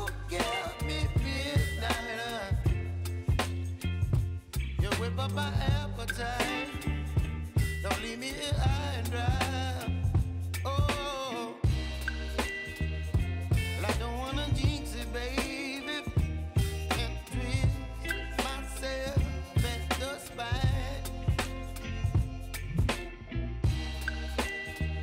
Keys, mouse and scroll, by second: 0.2 click, 3.0 click, 4.3 ctrl+x, 5.5 click, 8.7 ctrl+shift+v, 9.3 click, 9.9-11.6 typing, 12.6 click, 13.3-15.0 typing, 15.9 click, 22.7-24.2 typing.